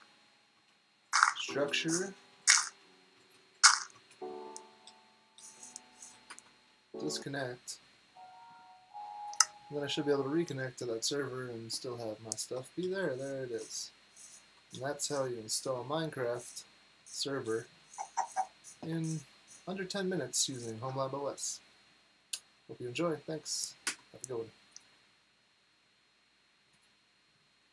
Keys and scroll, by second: 0.4-3.0 typing, 4.5-6.7 typing, 10.6 typing, 12.4-15.6 typing, 17.3 typing, 18.8-20.8 typing, 23.8 typing, 25.4 typing.